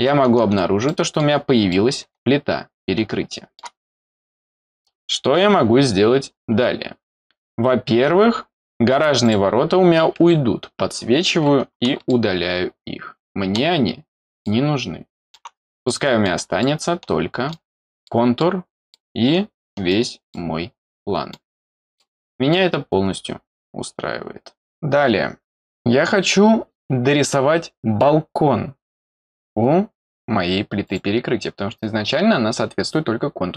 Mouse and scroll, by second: 0.8 middle click, 1.7-3.6 middle drag, 9.2 click, 12.1-13.5 middle drag, 14.4 middle click, 15.8 middle click, 16.6 middle click, 18.0 middle click, 18.9 middle click, 20.3-21.3 middle drag, 21.9 middle click, 30.8 click.